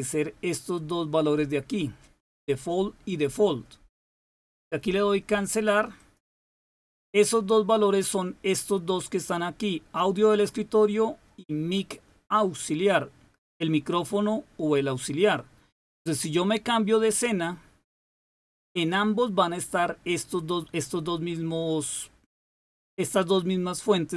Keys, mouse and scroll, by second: 5.9 click, 17.0 click.